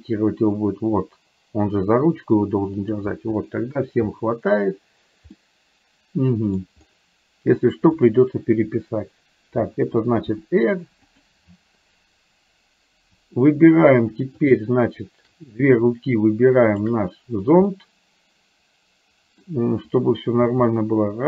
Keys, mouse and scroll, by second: 3.6 middle click, 5.4-6.6 middle drag, 7.9 click, 10.3 r, 14.6 shift+click, 17.7-19.6 middle drag, 20.6 g.